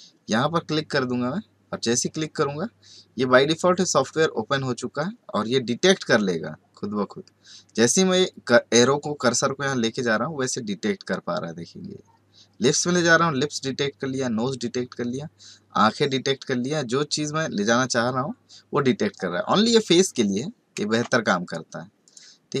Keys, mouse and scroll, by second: 21.0 ctrl+space, 21.4 ctrl+click, 21.5-22.6 ctrl+space, 22.0 ctrl+click, 22.1 ctrl+space, 22.5 ctrl+click.